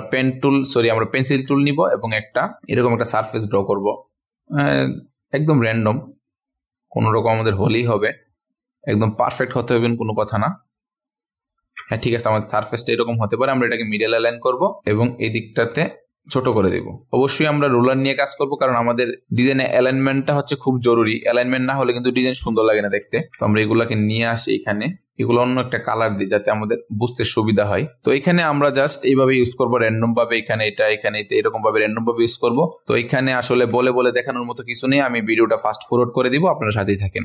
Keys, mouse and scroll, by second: 1.1-2.1 drag, 2.5 ctrl+alt+scroll up 1, 2.7 ctrl+alt+scroll down 1, 3.4-12.1 drag, 12.1 v, 12.4-14.1 drag, 14.6-15.1 ctrl+alt+scroll up 1, 15.1-16.9 drag, 17.1 alt+shift+click, 17.4 ctrl+alt+scroll down 1, 18.3-19.3 ctrl+scroll up 1, 19.3 click, 20.7 ctrl+alt+scroll down 1, 22.7-23.3 alt+scroll down 1, 23.3 ctrl+alt+scroll up 1, 24.0-25.7 drag, 26.0 x, 26.4 click, 27.7 ctrl+alt+scroll up 1, 28.0-32.5 drag, 32.7 ctrl+z, 32.8 ctrl+z, 33.5 ctrl+z, 34.0 click, 35.6 ctrl+alt+scroll down 1, 36.3 click.